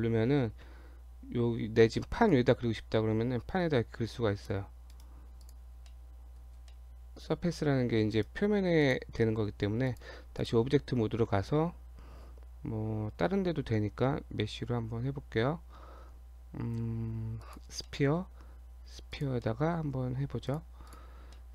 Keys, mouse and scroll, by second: 2.3 click, 4.9 right click, 5.9 middle click, 6.5 scroll up 1, 6.7 middle click, 8.1 right click, 9.2 middle click, 9.6 Tab, 9.9 click, 10.4 click, 11.3 shift+a, 17.8 middle click, 18.4 s, 19.5 middle click, 20.5 click, 20.8 click, 21.3 middle click.